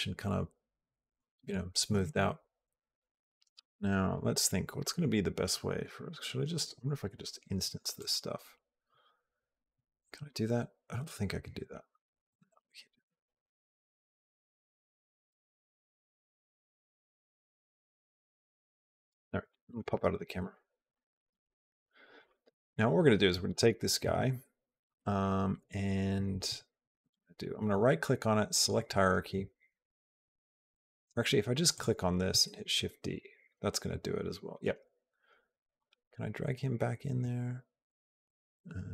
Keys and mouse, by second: 7.8-12.2 right drag, 17.3-18.9 drag, 19.3 middle click, 20.4-23.4 shift+middle drag, 23.4 click, 26.9 right click, 31.6 click, 32.3 shift+d, 35.6 click.